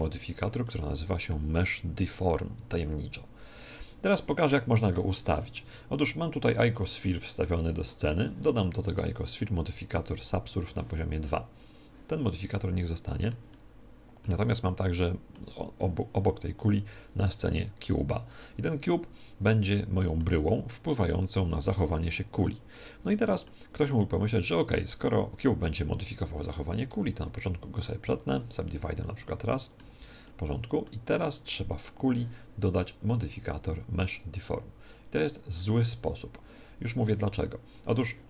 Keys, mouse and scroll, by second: 0.6-2.4 middle drag, 4.9 right click, 8.0 click, 9.2 ctrl+2, 12.5-16.4 middle drag, 16.8 right click, 18.4-20.3 middle drag, 21.6 right click, 22.7-24.8 middle drag, 25.3 right click, 26.8 Tab, 29.0-32.0 middle drag, 29.8 Tab, 31.7 click, 31.7 right click, 33.2-35.6 drag, 33.2 middle click.